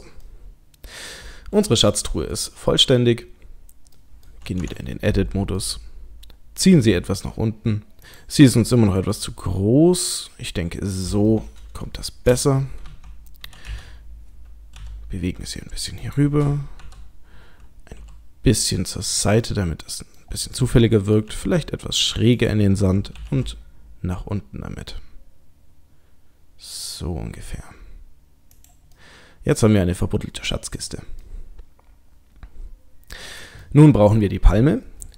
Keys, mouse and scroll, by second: 0.3 click, 0.3 middle click, 2.3 middle click, 2.7-3.1 scroll down 2, 4.0 middle click, 4.0-4.6 scroll down 2, 4.6 Tab, 5.1 middle click, 6.7 g, 9.0 s, 11.3 middle click, 12.9 KP_3, 13.7 KP_1, 14.7 g, 16.8 KP_7, 17.8 r, 19.4 middle click, 20.4-21.2 scroll up 2, 20.8 middle click, 21.3 r, 23.2 g, 29.0 middle click, 30.2 middle click, 30.8 click, 31.2 middle click, 33.6 middle click.